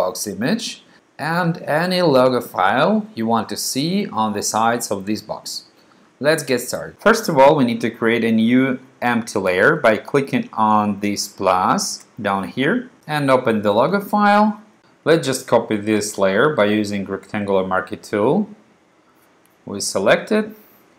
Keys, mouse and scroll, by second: 11.8 click, 14.0 click, 17.1 click, 19.0 click, 19.3-20.9 drag.